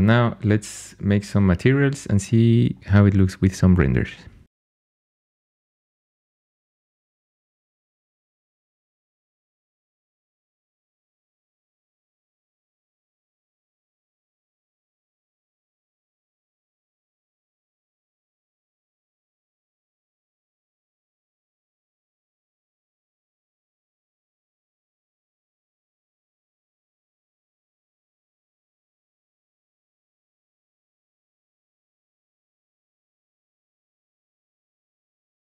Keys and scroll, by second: 8.4 super+Tab, 9.7 space, 14.9-15.9 typing, 16.0 Tab, 17.4 Tab, 18.0 Tab, 18.2 Tab, 18.3 Tab, 18.8 Tab, 19.4 Tab, 19.5 Tab, 20.4 Tab, 20.5 Tab, 21.3 Tab, 24.8 Tab, 24.9 Tab, 27.0 super+z, 27.8 Tab, 31.7 super+l, 31.9 m, 33.5-35.5 typing.